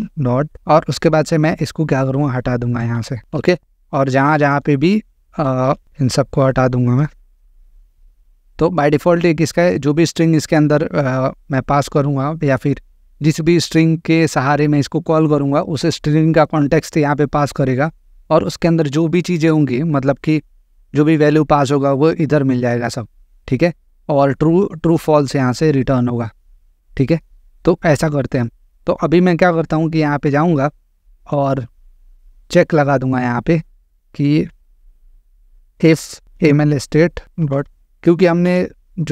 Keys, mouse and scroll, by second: 0.5 click, 0.7 scroll, 1.6 click, 4.4 click, 7.0 click, 7.8 BackSpace, 9.4 click, 27.2 click, 28.3 click, 30.3 click, 32.3 click, 33.7 click, 34.6 Return, 34.9-38.4 typing, 35.7 Return, 37.9 Return.